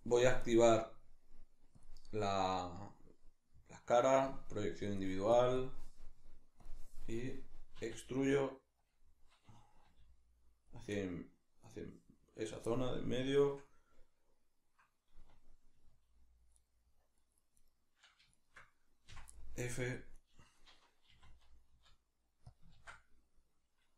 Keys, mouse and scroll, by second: 0.4-6.7 drag, 7.8 e, 8.9 click, 9.8 g, 10.7 click, 11.0-12.4 middle drag, 12.4 right click, 12.7-16.6 middle drag, 15.9 g, 16.6 right click, 17.2 middle click, 17.6 right click, 18.4 shift+right click, 19.1 f, 19.4 middle click, 20.2 right click, 21.1 e, 22.6 click, 22.7 ctrl+z.